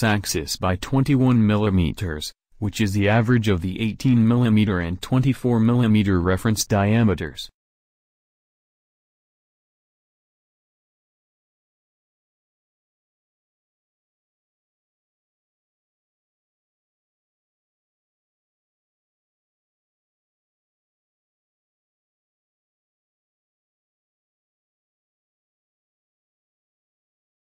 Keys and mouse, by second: 12.7-14.2 drag, 16.7 Tab, 21.2 a, 21.7 a, 23.1 shift+d, 26.9 alt+Tab.